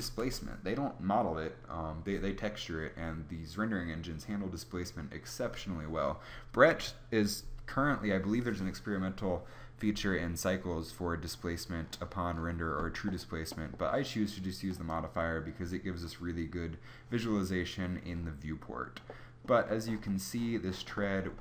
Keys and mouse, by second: 0.1 KP_0, 11.7 middle click, 12.8-18.2 middle drag.